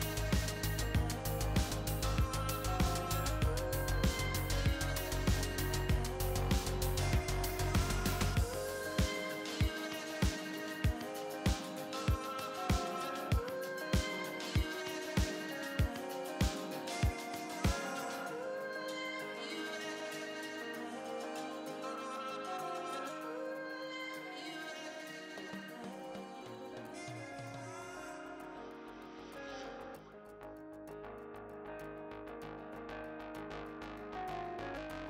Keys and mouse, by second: 6.6 right click, 7.4-8.5 drag, 8.9-12.1 drag, 12.1-16.4 middle drag, 19.1-23.8 middle drag, 24.1-25.1 drag, 25.1 Tab, 27.7 click, 29.4 click, 29.9 middle click, 31.7 Tab, 34.4 right click.